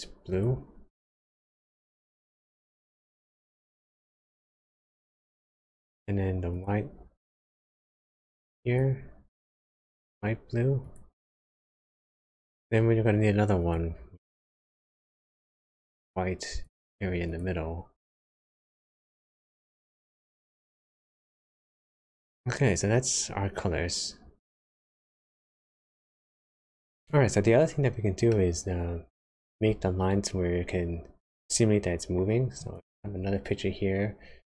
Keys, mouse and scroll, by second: 6.5 click, 7.4 click, 13.6 click, 15.0 click, 17.3 click, 21.4-22.0 scroll down 2, 22.0 middle click, 26.9 click, 26.9 middle click, 32.6 click.